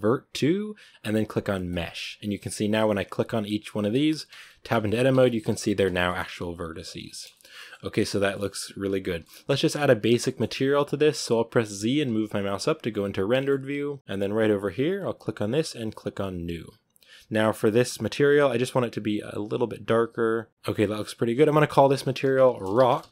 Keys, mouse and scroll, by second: 2.4-4.2 right drag, 4.2 Tab, 4.6 Tab, 4.8 right click, 5.0 Tab, 5.1-5.4 scroll up 4, 5.4 a, 5.5 a, 5.7 scroll down 1, 5.8-6.2 shift+middle drag, 6.2 Tab, 6.4 right click, 6.6 Tab, 6.8 Tab, 6.9-7.2 scroll down 3, 7.2-12.0 shift+middle drag, 12.0 z, 12.5 z, 12.9 right click, 13.7 middle click, 14.4-19.4 drag, 20.5-21.5 middle drag, 21.5-23.1 drag.